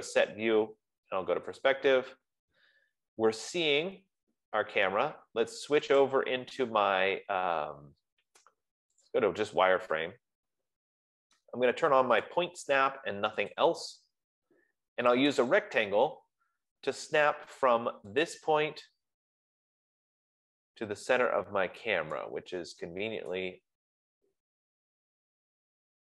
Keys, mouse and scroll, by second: 2.9 click, 4.6-5.6 scroll, 6.6 click, 10.1 click, 12.5 click, 13.8 click, 17.2 middle click, 17.6 middle click, 18.6 click, 19.3 middle click, 20.0-21.1 scroll, 21.1-21.5 scroll, 22.5-23.1 scroll, 23.8 right click, 24.1-24.8 scroll, 24.8-25.2 scroll, 25.3-25.9 scroll.